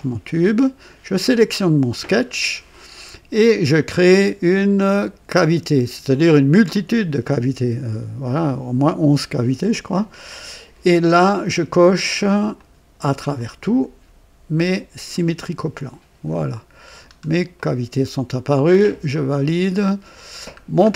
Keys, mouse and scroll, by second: 1.1 click, 6.6 click, 12.4 click, 13.3 click, 15.0 click, 16.2-17.2 scroll down 3, 17.5-18.2 right drag, 19.0 click, 19.8-20.7 scroll down 4.